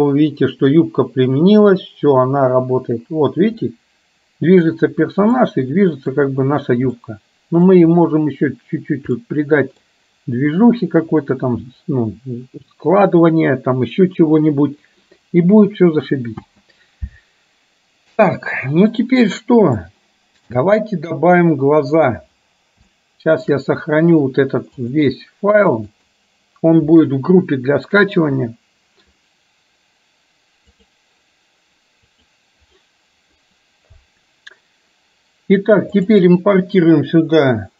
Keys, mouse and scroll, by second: 3.9-4.9 middle drag, 5.6 middle click, 7.1-7.9 middle drag, 9.4 middle click, 11.7 KP_1, 16.5 space, 20.0-20.6 shift+middle drag, 23.0-23.6 shift+middle drag, 24.9-26.4 drag, 29.3-37.7 drag.